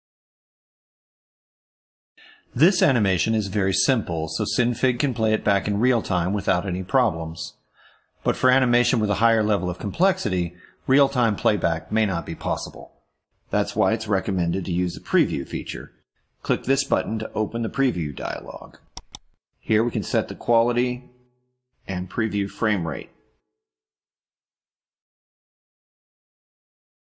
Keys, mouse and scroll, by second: 0.8 click, 4.1 click, 18.9 click, 21.3 click, 22.0 1, 22.8-23.8 drag, 24.5-25.5 typing, 26.9 click.